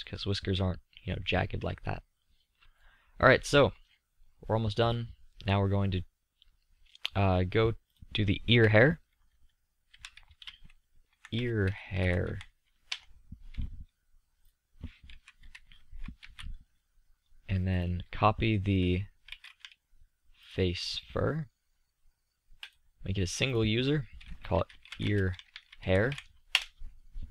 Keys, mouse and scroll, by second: 0.6-6.1 middle drag, 6.1-7.8 drag, 9.1-11.0 middle drag, 17.5-18.9 middle drag, 20.9-23.8 middle drag, 26.6-27.3 middle drag.